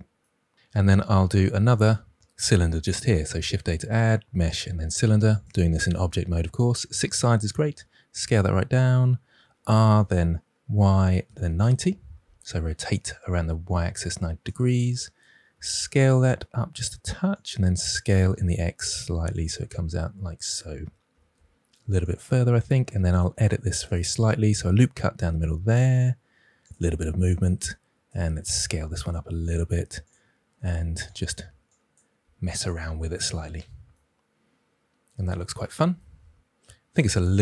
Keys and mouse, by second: 0.7 Tab, 1.6 shift+middle click, 3.2 shift+a, 7.5 s, 8.7 click, 9.3 r, 10.6 y, 11.2 9, 11.2 0, 11.5 Return, 13.1 s, 14.4 click, 15.5 s, 17.3 click, 17.9 s, 18.3 x, 19.3 drag, 21.0 s, 21.3 x, 22.0 click, 22.7 Tab, 23.4 ctrl+r, 23.7 click, 23.9-24.4 drag, 25.1 g, 26.6 click, 27.3 alt+z, 27.6 drag, 28.6 s, 29.4 click, 29.6 g, 30.0-30.4 drag, 30.5 r, 31.0 click, 32.1 s, 32.5 click, 32.6 g, 33.1-33.5 drag, 33.5 Tab.